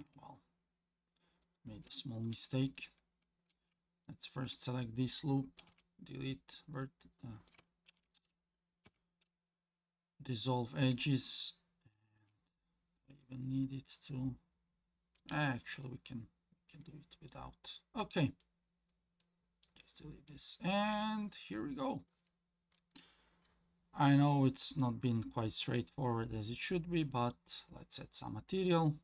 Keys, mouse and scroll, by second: 1.9 shift+middle click, 2.5 middle click, 3.0 scroll up 1, 4.0 alt+click, 4.7-5.0 scroll up 1, 5.7 x, 7.9 ctrl+z, 8.8 x, 12.2 Tab, 12.6-15.2 middle drag, 15.4 shift+middle drag, 15.8-17.3 middle drag, 17.5 scroll up 2, 18.0 scroll down 2, 18.4-19.6 middle drag, 19.9 scroll down 1, 20.3-21.8 middle drag, 24.0 scroll up 2, 24.8-25.8 middle drag, 24.8 scroll up 1, 26.0 scroll down 2, 26.4-27.3 middle drag.